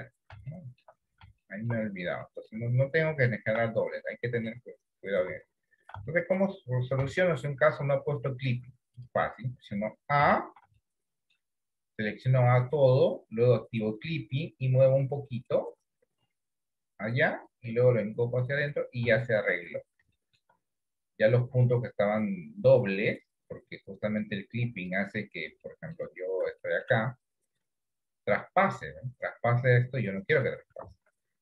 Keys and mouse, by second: 0.5 shift+middle click, 1.6 shift+middle click, 2.4 shift+middle click, 3.4 shift+middle click, 4.2 shift+middle click, 5.4 ctrl+z, 6.3 shift+middle click, 7.4 middle click, 10.3 a, 11.0 middle click, 14.1 click, 15.5-17.5 drag, 18.1 click, 19.3 shift+middle click, 20.2 shift+middle click, 24.8 click, 25.7 shift+middle click, 26.7 shift+middle click, 27.8-30.5 drag, 31.0 ctrl+z.